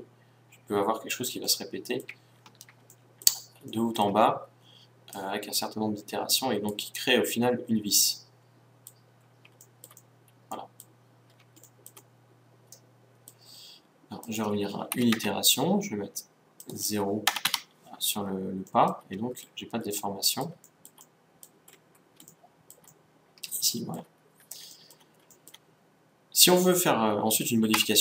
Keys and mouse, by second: 0.8 middle click, 1.5-5.2 middle drag, 5.2-7.1 drag, 7.1-8.7 middle drag, 9.0 middle click, 14.3-16.2 drag, 16.6-18.7 drag, 27.8 Tab.